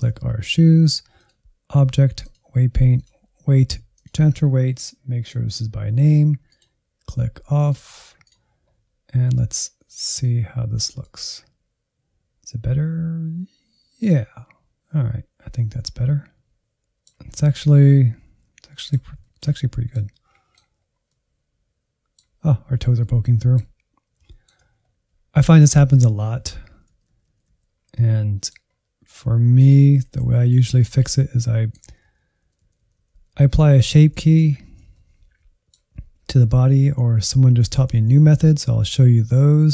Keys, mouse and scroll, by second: 6.4-9.6 drag, 9.9 Insert, 11.0-13.2 drag, 15.9 middle click, 16.1 scroll up 2, 16.4 shift+middle click, 17.0 scroll up 1, 17.3 middle click, 17.8-18.9 Right, 19.2-24.6 middle drag, 24.6-25.0 scroll up 4, 26.4-26.7 Right, 26.9 Right, 27.1 Right, 27.3 Right, 27.5 Right, 27.6 scroll down 1, 27.8 middle click, 28.6-28.9 scroll down 2, 28.9 Insert, 29.5 click, 29.9 KP_Decimal, 30.3 Insert, 30.7-32.0 middle drag, 32.0 Right, 32.2 Right, 32.4 Left, 32.7 Left, 32.8 Left, 33.0 Left, 33.2 Left, 33.4 Left, 33.6 Left, 33.8 Left, 34.2 Left, 34.4 Left, 34.8-36.8 middle drag, 36.8 Left, 37.0 Left, 37.5 Right, 37.7 Right, 37.9 Right, 38.1 Right, 38.3 Right, 38.5 Right, 38.7 Right, 38.9 Right, 39.0 Right, 39.2 Right, 39.4 Right, 39.6 Right.